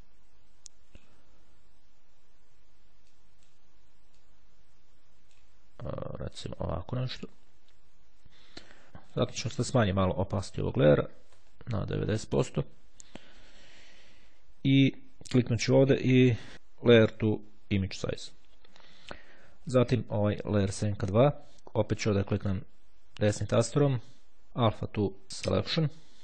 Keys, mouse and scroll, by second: 0.0 click, 3.0-3.9 drag, 4.2-5.9 drag, 5.9-6.4 ctrl+scroll down 1, 6.8-7.4 ctrl+scroll up 2, 7.4 ctrl+scroll up 1, 8.0-8.4 ctrl+scroll down 2, 11.2 KP_9, 11.5 KP_Enter, 15.6 right click, 18.1 click, 19.7 click, 20.9 click, 22.4 right click, 25.3 click.